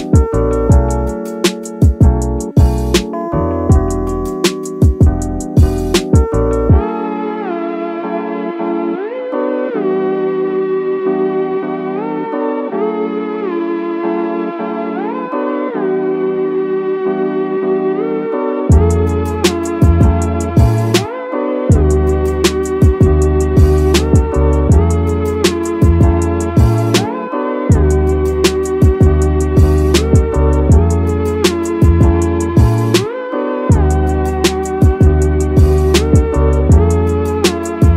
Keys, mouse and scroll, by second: 0.0 g, 2.2 click, 6.3-7.4 drag, 8.5 n, 9.5 t, 9.9 scroll down 1, 12.3 shift+middle click, 13.5 middle click, 15.0 click, 15.0 shift+middle click, 16.4 click, 16.9-17.3 scroll up 1, 17.4 shift+middle click, 17.8-18.5 scroll down 1, 19.8 click, 20.4 click, 21.5 click, 23.1 click, 28.9 middle drag, 28.9 scroll down 1, 29.4 scroll up 1, 29.6 middle drag, 29.6 scroll down 1, 30.3 click, 32.6-33.7 drag, 35.1 KP_7, 35.9 shift+middle drag, 36.8-37.9 drag.